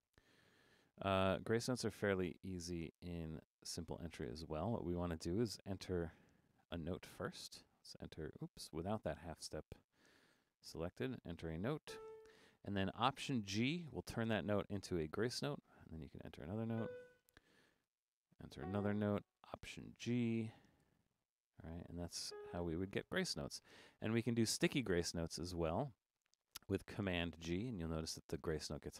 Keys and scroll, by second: 1.3 BackSpace, 4.2 BackSpace, 6.7 4, 13.7 alt+g, 15.2 5, 17.9 4, 20.4 alt+g, 20.8 5, 27.6 super+g.